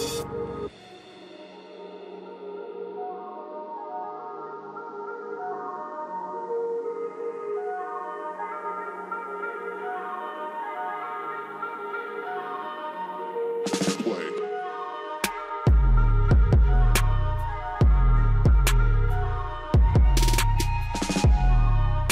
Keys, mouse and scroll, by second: 1.4-2.6 drag, 2.6 scroll down 1, 4.2 click, 5.7 ctrl+shift+q, 6.2-10.9 drag, 10.9 click, 14.2-22.1 drag, 15.4 typing.